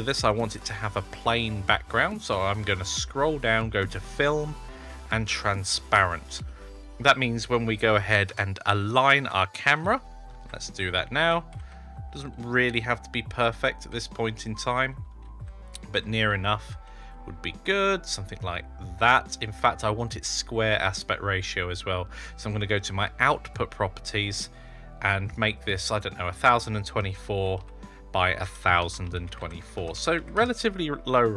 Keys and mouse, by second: 4.0 click, 5.6 click, 6.2-6.8 middle drag, 8.1 KP_0, 10.2 shift+`, 23.3 click, 25.2 click, 26.3-30.9 drag.